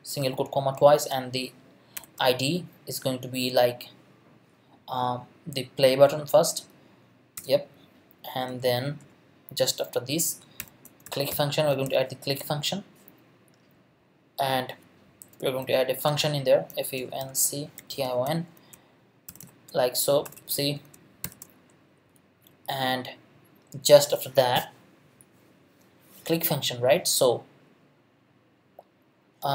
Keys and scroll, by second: 0.2 Left, 1.9 shift+3, 5.7 p, 6.1 l, 7.4 Return, 10.6-12.4 typing, 15.6-21.2 typing.